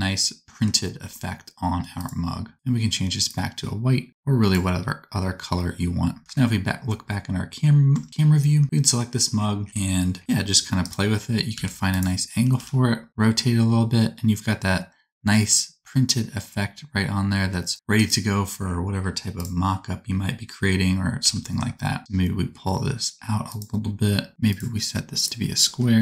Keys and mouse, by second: 2.0-8.6 middle drag, 6.2 KP_0, 7.9 Tab, 8.6 middle click, 10.2 g, 11.5 g, 12.4 r, 12.8-15.0 middle drag, 15.6-18.0 drag, 21.2 g, 25.2-26.0 drag.